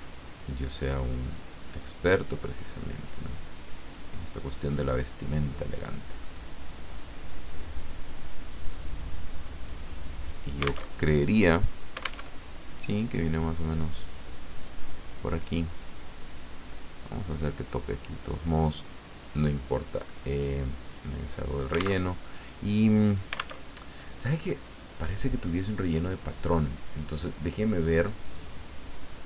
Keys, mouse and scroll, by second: 0.8 click, 1.9 click, 2.8 click, 3.3 click, 4.6 click, 5.1 click, 6.3 click, 7.3 click, 7.9 click, 8.5 click, 9.7 click, 10.9 alt+Tab, 12.3 alt+Tab, 15.4 click, 18.2 click, 19.9 click, 20.8 click, 21.3 click, 22.0 alt+Tab, 23.6 alt+Tab, 24.9 click, 26.8 click, 28.4 click.